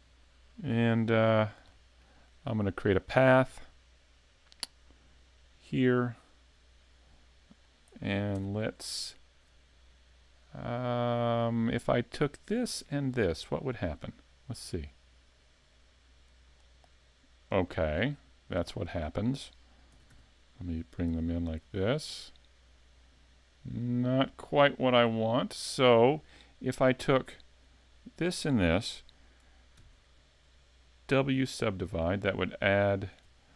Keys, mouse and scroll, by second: 0.8 shift+middle click, 1.4 scroll up 3, 1.7 shift+middle click, 3.0 click, 5.6 click, 7.2 click, 8.4 Tab, 12.2 right click, 13.1 shift+right click, 14.9 click, 18.3 scroll down 2, 18.7 shift+middle click, 19.9 s, 25.0 click, 27.8 shift+right click, 29.8 w, 32.9 right click.